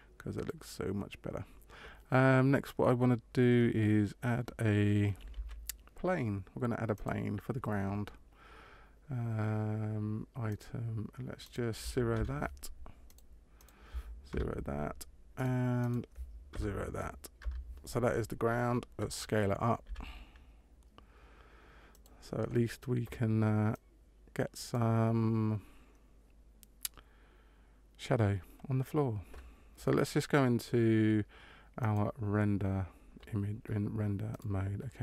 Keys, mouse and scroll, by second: 5.2 shift+a, 10.4 click, 11.4 click, 13.5 click, 15.7 click, 19.8 s, 23.6 click, 32.5 click.